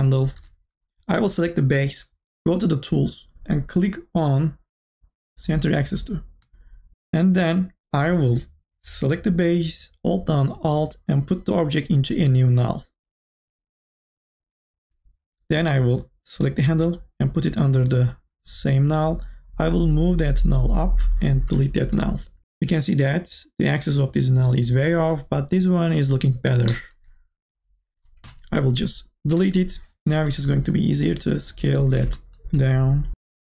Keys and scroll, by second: 0.2 BackSpace, 29.6 Delete.